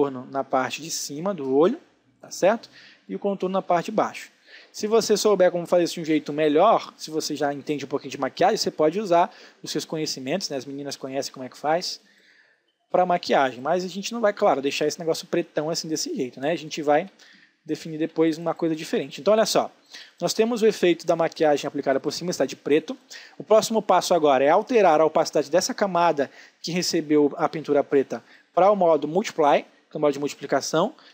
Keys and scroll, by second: 10.6 space, 16.6 ctrl+z, 18.2 ctrl+space, 30.9 ctrl+space.